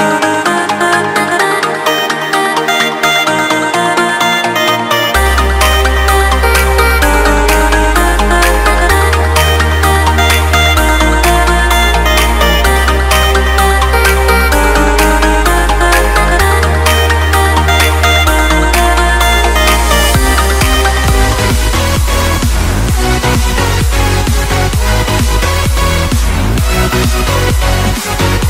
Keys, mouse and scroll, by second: 0.5 click, 3.6 click, 5.2 click, 7.9 click, 9.3 click, 10.3 right click, 14.6 click, 17.0 click, 18.6 ctrl+middle click.